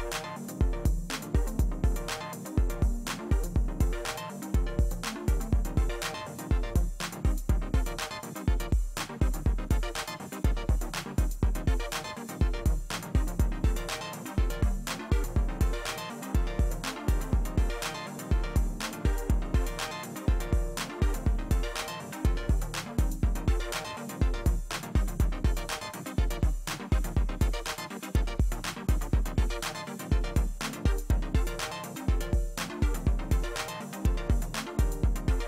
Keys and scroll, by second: 0.6 ctrl+alt+z, 5.9 space, 8.0 alt+space, 13.2 space.